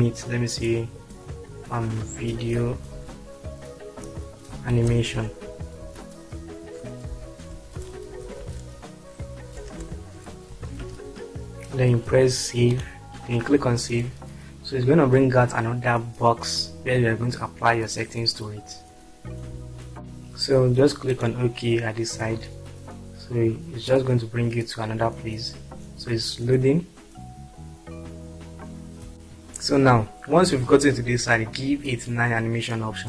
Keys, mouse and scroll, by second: 2.4-5.9 typing, 7.1-11.0 typing, 12.8-13.9 drag, 21.5 click.